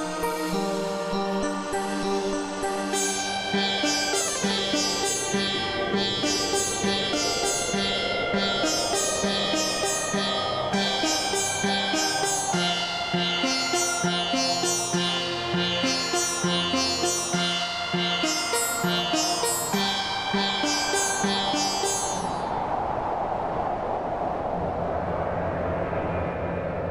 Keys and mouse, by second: 1.0 click, 4.0 click, 5.7 click, 6.8 click, 8.0 KP_Subtract, 9.0 click, 9.9 click, 11.6 click, 12.9 click, 14.3 click, 15.6 KP_Subtract, 16.3 click, 18.2 click, 20.1 click, 21.0 click, 21.9 click, 23.2 click, 24.6 click, 25.8 KP_Decimal, 26.8 click.